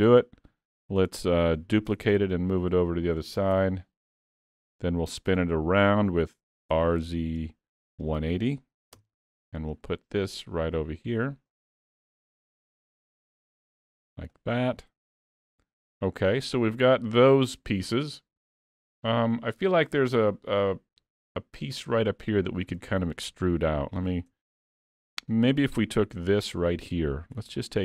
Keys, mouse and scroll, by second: 0.4-0.9 scroll down 2, 0.7 middle click, 1.9 shift+d, 3.6 KP_Decimal, 4.2 scroll down 7, 4.6 middle click, 6.7 r, 9.6-9.9 scroll down 3, 9.9 middle click, 10.9 click, 14.5-14.9 scroll down 5, 14.9 alt+a, 15.4 middle click, 15.9-16.3 scroll down 2, 16.3 middle click, 19.4 scroll up 1, 19.6 shift+middle click, 22.2 middle click, 22.7 scroll up 3, 23.1 shift+middle click, 24.1 click, 24.3 Tab, 24.7 middle click, 27.4 3, 27.6 click.